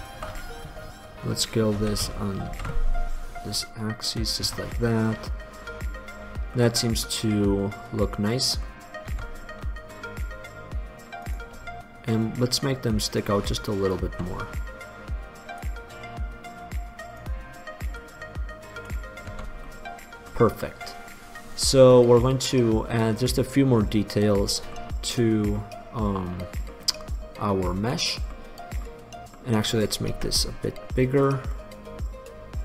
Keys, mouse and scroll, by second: 0.0 middle click, 2.0 s, 4.7 Tab, 5.1 middle click, 5.3 middle click, 6.3 middle click, 7.1 middle click, 8.9 middle click, 9.3 Tab, 11.5 right click, 13.9-15.0 right drag, 15.0 middle click, 15.8 click, 19.2 click, 19.5 Tab, 19.7 middle drag, 19.9 drag, 23.6-25.8 middle drag, 25.8-26.9 drag, 30.3 s, 31.5-32.6 drag.